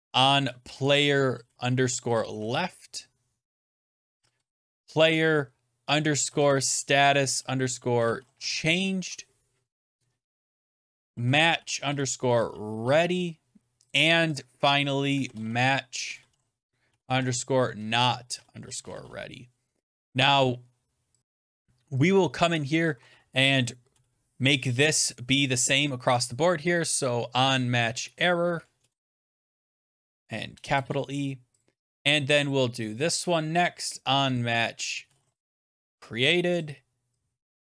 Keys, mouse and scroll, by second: 0.3-2.7 typing, 3.6 click, 3.7 click, 3.9-9.0 typing, 10.2 click, 10.2 click, 10.5-13.2 typing, 13.8 click, 14.1 click, 14.3 click, 14.8-19.4 typing, 21.2 click, 21.5 click, 22.4 click, 23.2 click, 23.8 BackSpace, 28.1 click, 28.6-31.4 typing, 30.2 click, 31.5 click, 33.7 click, 34.7-36.3 typing, 36.5 click, 37.4 click.